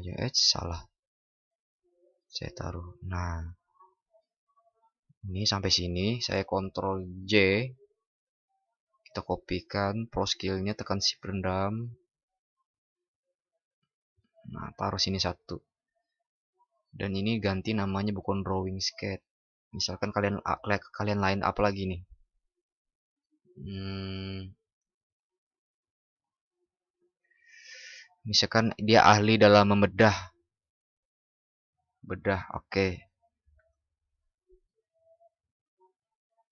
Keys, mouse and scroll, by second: 7.0 ctrl+shift+i, 21.8 ctrl+shift+@.